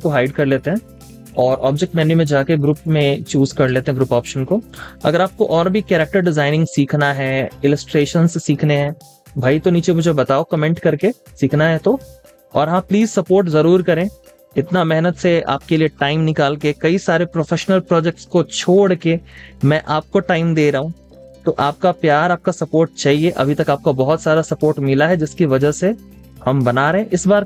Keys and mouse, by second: 4.1 double click, 4.5-6.0 typing, 6.7 double click, 7.2 space, 7.4 double click, 7.7 space, 13.0-13.6 typing, 16.7 space, 17.5 space, 17.7 double click, 21.5 v, 26.8 double click.